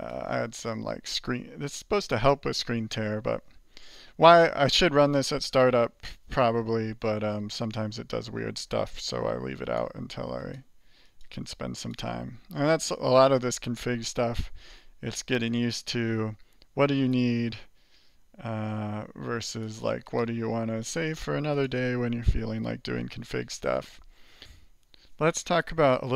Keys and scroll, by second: 0.5 alt+q, 7.4 alt+q, 7.5 alt+q.